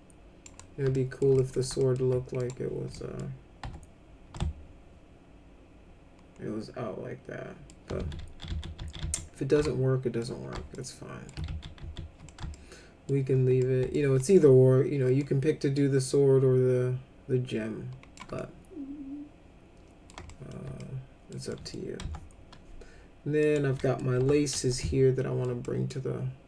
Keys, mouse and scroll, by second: 0.9 alt+middle click, 1.3 middle click, 1.7 alt+middle click, 2.4 click, 2.9 middle click, 3.6 F4, 4.3-7.7 alt+middle drag, 7.9 ctrl+z, 8.2 ctrl+z, 8.4 ctrl+z, 8.7 ctrl+z, 9.0 ctrl+z, 9.6 alt+middle click, 10.7 alt+middle click, 11.4 ctrl+z, 11.7 ctrl+z, 12.2 middle click, 12.5 alt+middle click, 13.6 alt+middle click, 14.1 alt+middle click, 15.2-18.1 drag, 18.3-20.0 alt+middle drag, 20.2 middle click, 20.7 alt+middle click, 21.4 middle click, 21.9 F3, 23.4 click, 23.7 middle click, 24.1 F3, 24.8 alt+middle click, 25.6 middle click.